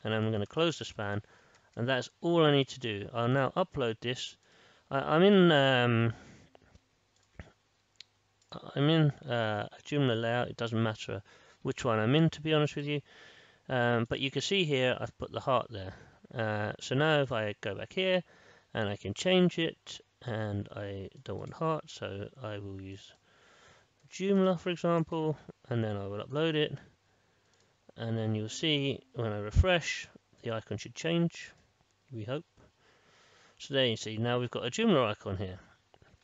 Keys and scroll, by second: 0.6-2.0 typing, 9.4 ctrl+shift+r, 29.5 ctrl+shift+r.